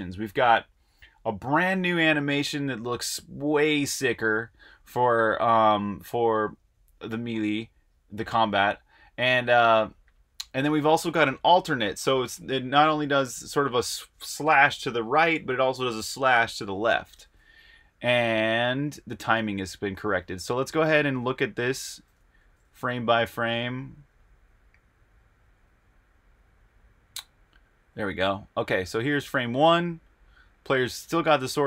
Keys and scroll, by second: 22.5 Right, 22.6-29.1 typing, 30.9-31.6 typing.